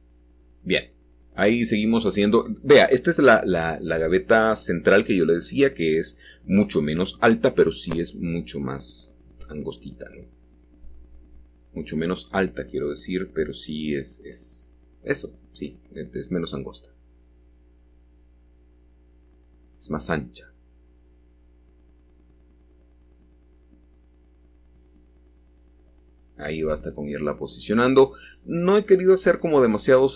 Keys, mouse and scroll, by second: 1.4 1, 7.1 click, 7.6-10.2 middle drag, 11.1 1, 13.8 l, 15.5 g, 18.4 click, 19.3-21.6 middle drag, 19.3 scroll down 1, 21.6-22.8 scroll up 1, 22.8-24.2 scroll up 1, 27.0 shift+click, 27.6-29.1 middle drag, 29.1-30.1 scroll down 1.